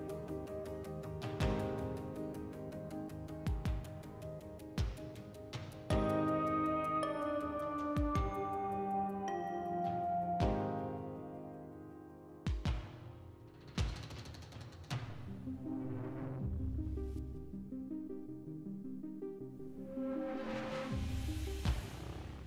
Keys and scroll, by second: 5.2 3, 7.1 s, 12.5 s, 13.7 s, 15.2 s, 16.5 s, 18.0 s, 19.7 s, 21.8 s.